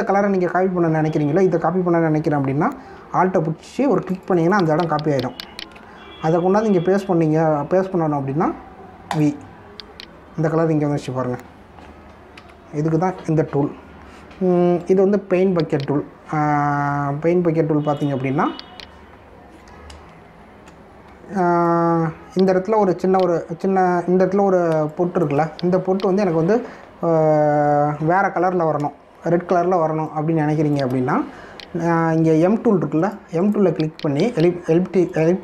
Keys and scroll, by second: 13.3 ctrl+z, 21.2 ctrl+-, 22.3 space, 25.7 space, 30.1 ctrl+=, 30.8 space.